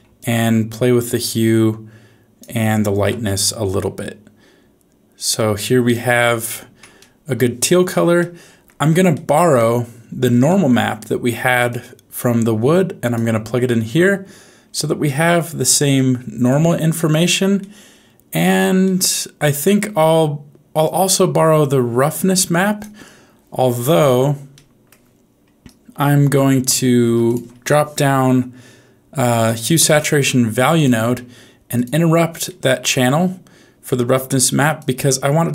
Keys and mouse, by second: 6.9 shift+middle click, 8.2 middle click, 9.2 middle click, 10.4 middle click, 11.6 click, 11.9-13.2 drag, 15.0 middle click, 15.9 middle click, 17.7 middle click, 18.9 middle click, 20.8-22.8 drag, 24.5 middle click, 27.0 shift+a, 34.9 click.